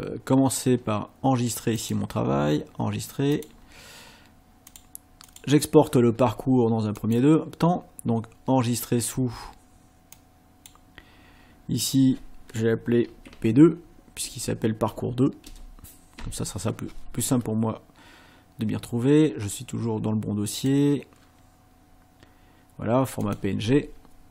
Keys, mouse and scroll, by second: 1.9 click, 3.4 click, 4.7 click, 5.3 click, 7.0 click, 10.2 click, 13.3 Right, 13.7 Left, 14.3 Right, 15.5 BackSpace, 16.2 KP_2, 20.6 click, 23.3 click.